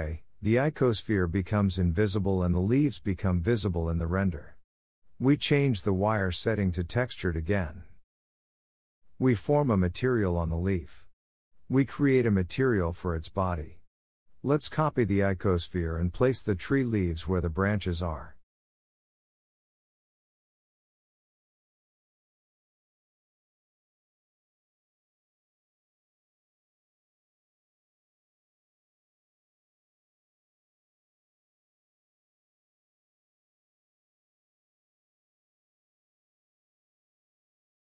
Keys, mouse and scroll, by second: 4.6-6.9 drag, 7.1 scroll up 1, 7.2-8.1 middle drag, 8.1-8.8 scroll up 1, 8.8 click, 9.5-10.0 scroll down 10, 10.0 shift+middle click, 10.5 click, 11.5 click, 12.3-13.2 drag, 15.6 click, 16.0 shift+middle drag, 16.1-16.7 scroll up 1, 16.7 click, 17.6 click, 23.5 click, 23.8-24.2 scroll down 1, 24.2 shift+middle click, 24.3-24.7 scroll up 3, 24.7 click, 25.0-26.1 middle drag, 26.1-26.5 scroll down 1, 27.5 g, 29.0-32.0 middle drag, 32.5 click, 33.4-34.7 drag, 34.7 KP_0, 36.0-37.2 scroll down 7, 37.2-37.8 scroll down 1, 37.8-37.9 drag.